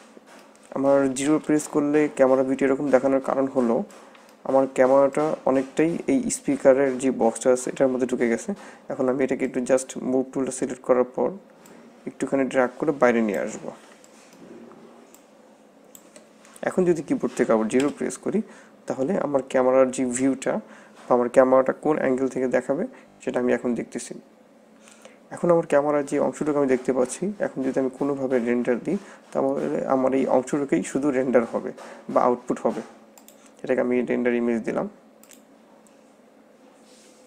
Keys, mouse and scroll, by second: 0.1 middle click, 1.3 KP_0, 3.1-3.9 scroll down 8, 4.1 middle click, 4.5-5.3 scroll down 6, 5.3 middle click, 7.9-8.3 scroll down 3, 9.6 middle click, 11.8 click, 13.7 scroll down 4, 14.2 shift+middle click, 15.3 click, 17.8 KP_0, 19.0-19.6 scroll up 7, 33.1 click.